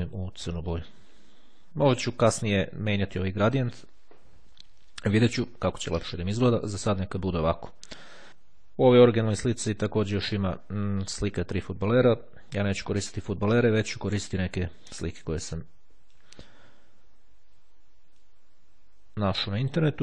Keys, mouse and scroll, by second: 8.0 click, 9.7 click, 12.7 click, 14.3 click, 15.3-16.7 drag, 18.3-20.0 drag.